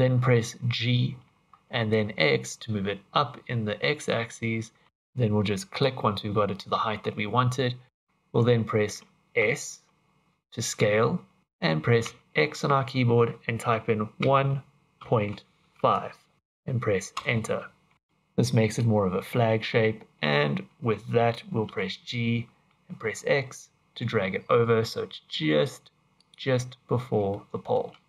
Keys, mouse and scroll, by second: 0.8 g, 6.6 middle click, 7.9-8.2 scroll up 1, 9.4 s, 17.9 middle click, 21.6 g, 26.7-27.4 scroll up 3, 27.3 shift+middle click, 28.0 scroll up 2.